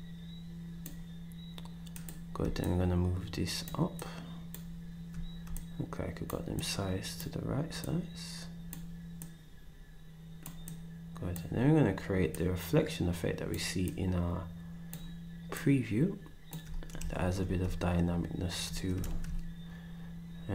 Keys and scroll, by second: 19.0 ctrl+shift+s.